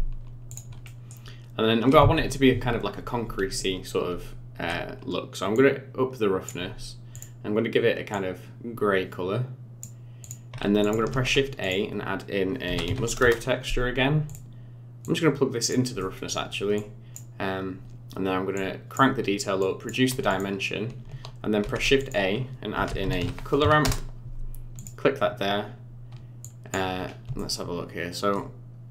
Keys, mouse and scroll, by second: 0.5 click, 0.8 middle click, 4.5 w, 5.5 click, 7.1 click, 10.2 click, 10.8 click, 11.1 shift+a, 15.0 click, 16.0 middle click, 16.7 click, 18.5 click, 19.6 click, 20.3 click, 21.6 shift+a, 26.4 click, 27.0 scroll up 6, 27.3 shift+middle click, 28.8-28.9 scroll up 1.